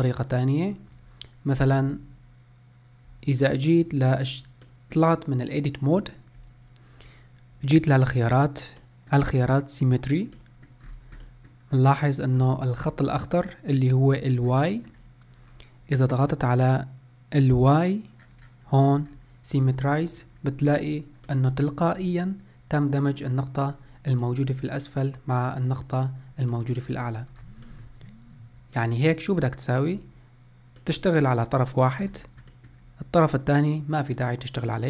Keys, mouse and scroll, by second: 0.3 middle click, 1.0 Tab, 1.9 Tab, 3.2 Tab, 4.2-7.8 middle drag, 8.9-10.9 middle drag, 10.9-11.3 scroll down 5, 11.3-12.4 middle drag, 12.4 scroll down 3, 12.9 scroll up 2, 14.3-14.7 scroll up 3, 14.7-15.6 middle drag, 15.6-18.1 scroll up 1, 18.4-19.1 drag, 19.1-19.6 scroll up 2, 19.6 Tab, 20.1 shift+middle click, 20.6 scroll up 1, 21.3 middle click, 22.0-23.5 scroll up 1, 24.3-25.8 middle drag, 25.8 scroll down 1, 26.6 middle click, 27.3 scroll down 2, 27.7-30.0 shift+middle drag, 30.0-30.8 scroll up 1, 30.8-32.1 middle drag, 32.1 scroll down 1, 32.6-34.8 shift+middle drag.